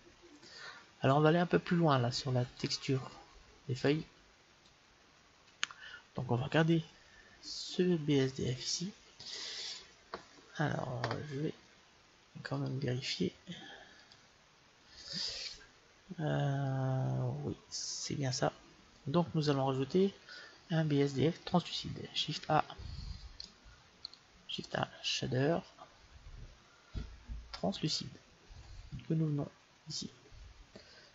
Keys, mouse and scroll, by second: 2.4-4.3 drag, 4.6-6.3 drag, 23.8-25.8 right drag, 24.4 shift+a.